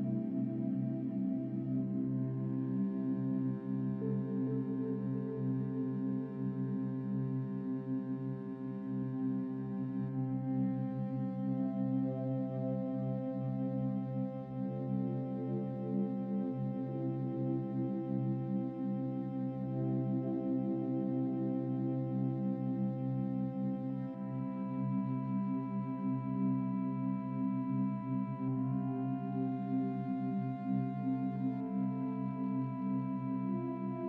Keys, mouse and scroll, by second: 0.7 click, 2.3 click, 2.9 click, 3.4 Tab, 4.0-5.7 drag, 5.8-6.1 scroll down 3, 8.1-9.1 drag, 9.1 Tab, 9.8 shift+middle click, 10.4 click, 11.5 click, 12.4 Tab, 12.6-13.4 scroll down 4, 13.4 shift+middle click, 13.7-15.3 drag, 15.4 ctrl+c, 16.2-16.8 drag, 17.2 Tab, 17.7 click, 19.7 ctrl+v, 20.7 click, 21.0 scroll up 3, 21.1-21.4 scroll down 4, 21.6-22.4 drag, 22.9 x, 24.1 ctrl+v, 24.4 scroll up 4, 24.8 click, 25.6-26.6 drag, 27.0 x, 28.3 Tab, 28.5 scroll up 3, 29.7 Tab, 29.9 scroll down 2, 31.4 click, 32.0 click, 33.0 click, 33.8 shift+click.